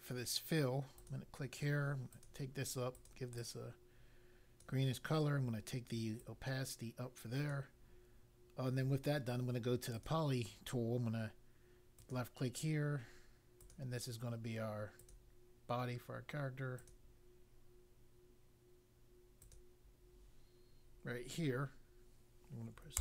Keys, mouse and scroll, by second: 0.9 click, 2.1 click, 2.9 click, 3.3 click, 6.2 click, 9.9 click, 11.9 click, 13.5 click, 14.9 click, 16.7 click, 19.4 click, 22.9 Return.